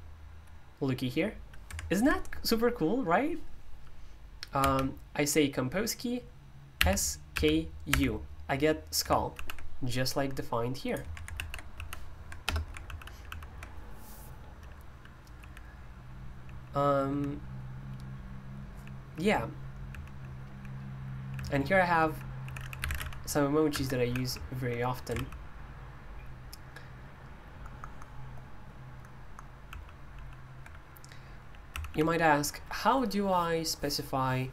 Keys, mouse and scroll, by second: 6.7-7.8 typing, 10.3-12.4 drag, 11.1-13.3 typing, 15.0-24.8 typing, 23.7 Escape, 25.1 super+l, 29.6 super+l, 30.1 super+l, 31.7 typing.